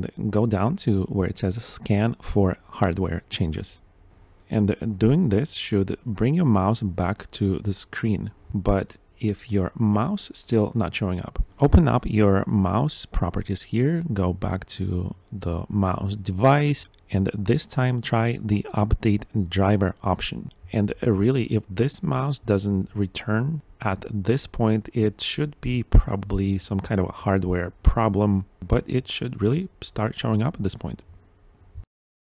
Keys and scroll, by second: 4.0 Return, 6.0 Up, 6.4 Down, 7.2 Down, 8.1 Return, 9.6 Right, 10.6 Down, 11.7 Return, 13.2 Tab, 14.3 shift+Tab, 14.9 Right, 15.6 shift+Tab, 16.2 Right, 16.8 Down, 17.2 Tab, 17.6 Down, 18.3 Tab, 19.3 Return, 22.9 Tab, 23.8 shift+Tab, 24.0 Return, 25.4 Tab, 26.6 Return.